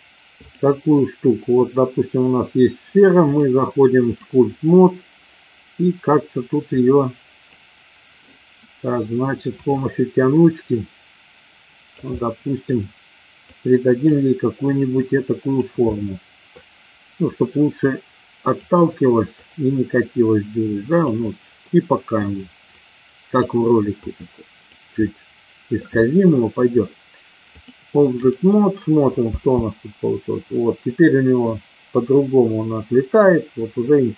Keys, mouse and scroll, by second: 0.4 click, 3.2 click, 6.7 click, 9.6 click, 10.7-12.0 drag, 12.1 middle click, 13.5 click, 14.9 click, 15.9 middle click, 17.7 click, 19.5-20.9 drag, 21.6 middle click, 22.7 click, 23.9 click, 25.1 middle click, 27.6 click, 29.2 space, 30.8 middle click.